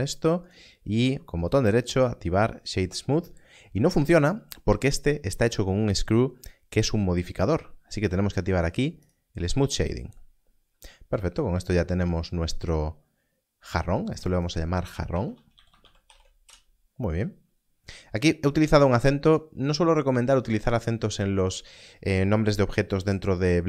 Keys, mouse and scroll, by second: 0.4 right click, 1.5 click, 9.0 click, 14.1 click, 15.1-16.1 typing, 16.4 Return.